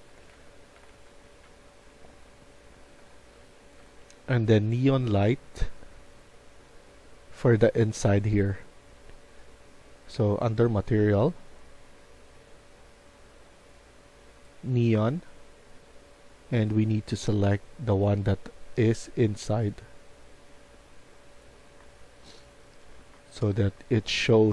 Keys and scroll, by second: 0.0-5.7 typing, 16.2 w, 21.7-24.5 typing.